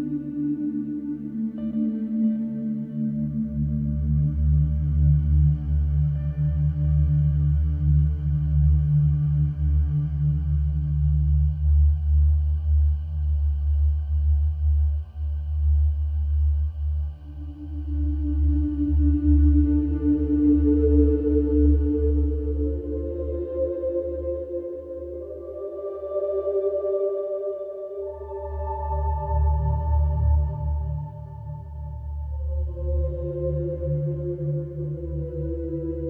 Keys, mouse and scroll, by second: 1.1-1.9 scroll up 4, 1.4 shift+middle drag, 1.9-2.7 shift+middle drag, 2.7 Tab, 3.0 click, 3.8 click, 4.0 click, 4.4 click, 5.1 shift+d, 8.3 ctrl+r, 13.9 alt+middle click, 14.1 alt+middle click, 14.4 scroll up 2, 14.6 shift+middle click, 15.5 click, 17.0 middle click, 17.4-17.8 scroll down 1, 17.8-19.2 middle drag, 19.2 alt+click, 19.9 alt+shift+click, 20.4 middle click, 20.8 scroll up 1, 21.0-22.1 shift+middle drag, 22.1 click, 22.4 click, 23.0 e, 29.7 scroll down 2, 30.5 middle click, 31.5 g, 32.6 middle click, 33.1-33.6 scroll up 2, 33.6 middle click, 34.5 click, 35.6 alt+click.